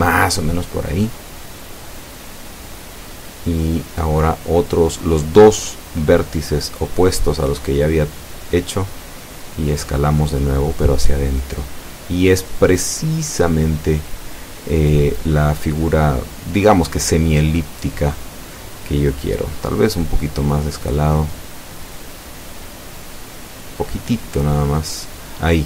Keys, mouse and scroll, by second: 1.2 Escape, 3.1 o, 4.2 s, 5.4-5.8 scroll up 2, 7.1 scroll up 2, 10.8 click, 13.4 right click, 14.4 shift+right click, 16.1 s, 18.2 scroll up 2, 18.8 click, 19.4 scroll down 2, 20.0 Tab, 20.7 click, 20.7-22.0 middle drag, 24.0 scroll up 1, 24.3 Tab.